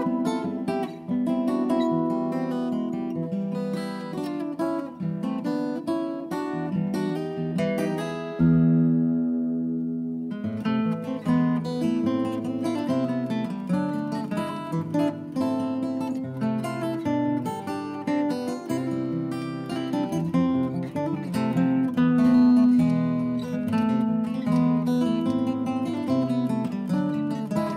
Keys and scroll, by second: 4.0 Return, 14.3 Escape, 14.9 Escape, 18.9 Escape, 19.2 Escape, 21.2 Escape, 22.0 Escape, 22.8 ctrl+z, 25.7 Delete, 26.1 Delete.